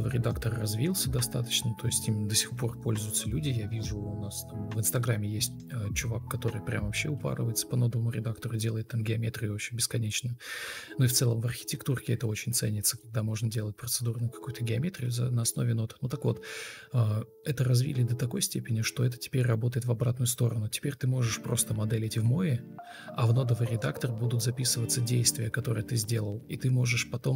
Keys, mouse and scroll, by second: 3.7 Escape, 6.0 Escape, 6.5 Escape, 9.4 Escape, 11.4 Escape, 12.6 Delete, 13.6 ctrl+e, 16.0 Delete, 16.2 Delete, 17.0 Delete.